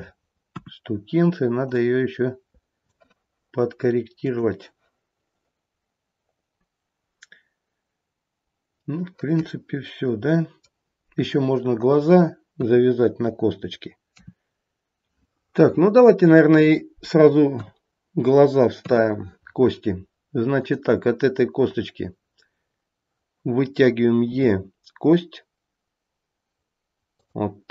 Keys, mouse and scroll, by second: 0.4 KP_1, 1.6 click, 4.2 click, 6.4-7.1 scroll up 1, 8.9 middle click, 11.0-11.9 scroll down 1, 11.9-12.5 scroll down 1, 12.5 KP_1, 14.1 KP_3, 15.2 middle click, 15.2-16.2 scroll down 1, 17.6 KP_1, 18.8 KP_3, 20.6 click, 24.3 e.